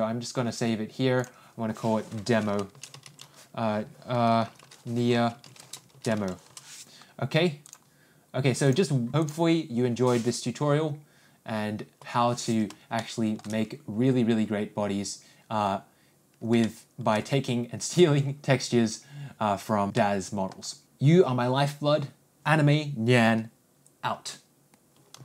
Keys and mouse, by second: 10.6 click, 12.5 n, 13.5-13.8 shift+middle drag, 17.1 shift+middle click, 20.4 middle click.